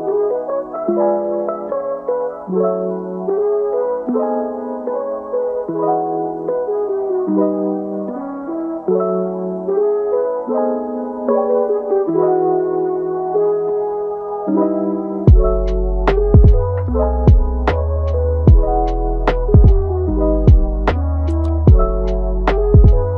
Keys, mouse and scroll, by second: 2.3 g, 3.5 alt+s, 5.2 e, 8.1 alt+s, 9.6 middle click, 10.3 scroll up 1, 10.5 middle click, 11.2 click, 11.9 click, 12.3 middle click, 12.9 click, 13.2 alt+s, 14.8-15.4 scroll down 2, 15.4 middle click, 16.3 g, 17.1-18.6 middle drag, 18.6 e, 20.2 middle click, 20.8 g, 21.6 alt+s, 23.0 g.